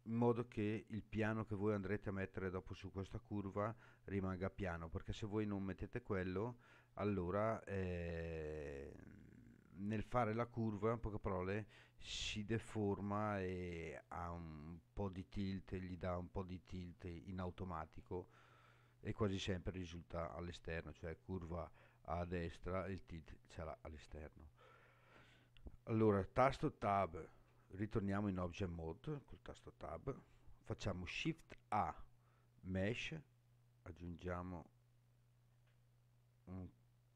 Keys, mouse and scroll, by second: 26.8 Tab, 31.2 shift+a.